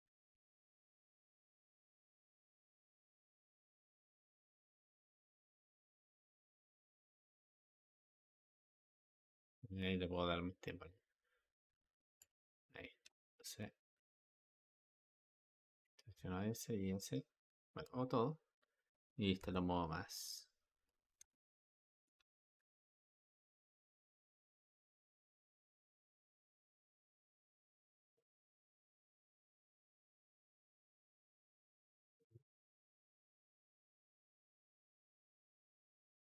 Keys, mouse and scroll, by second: 3.2 space, 5.6 click, 12.0 click, 13.3 Escape, 15.7 click, 17.7 a, 18.4-18.8 drag, 19.3 g, 25.0 space, 27.4 Escape, 27.9-30.9 drag.